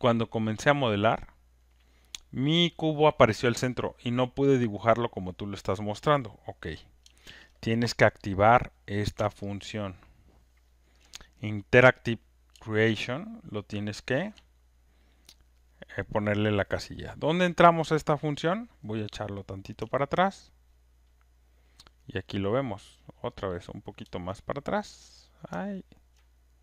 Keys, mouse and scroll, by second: 0.4 click, 3.7 click, 5.2 click, 7.2 ctrl+F1, 8.4 click, 10.9 ctrl+shift+click, 14.3 ctrl+click, 20.2-20.8 scroll, 23.0-23.4 scroll, 23.9 scroll, 25.8 middle click, 25.9 ctrl+middle click, 26.0 ctrl+middle click, 26.5 ctrl+middle click.